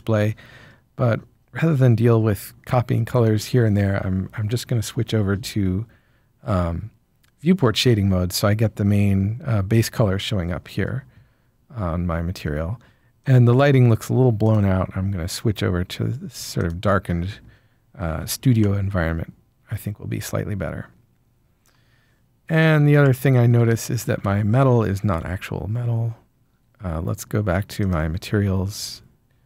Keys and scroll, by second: 18.0 Tab, 24.2 Tab, 25.1 Tab.